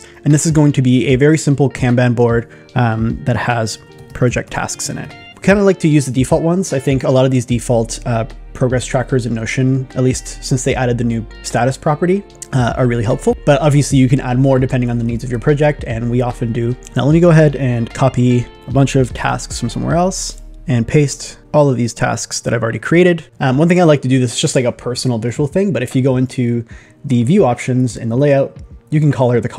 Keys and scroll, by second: 3.8 shift+p, 19.4 shift+super+n, 20.5 super+v.